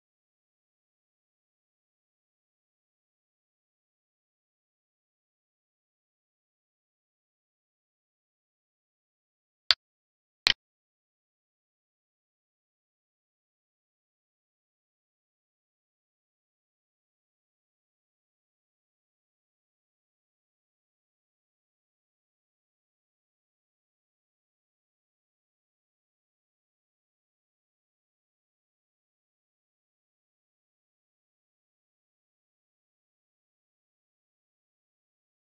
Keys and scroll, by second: 7.1 alt+e, 12.8 space, 17.7 space, 18.0 space, 28.5 alt+e, 30.2 Right, 31.0 Left, 31.8 space, 32.0 space.